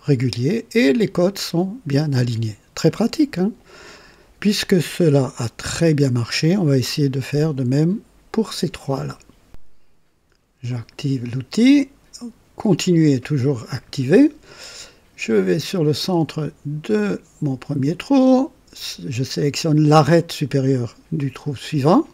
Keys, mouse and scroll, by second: 3.0-4.1 drag, 5.6-6.6 drag, 9.5 click, 10.6 click, 17.4 click.